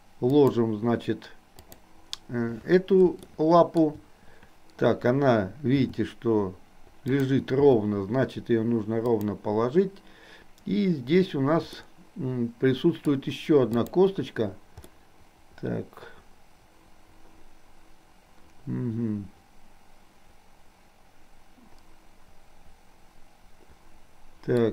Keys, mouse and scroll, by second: 3.3-3.8 shift+middle drag, 5.7 r, 7.1 click, 7.7 r, 11.8-13.2 middle drag, 13.8 click, 15.1-24.6 middle drag.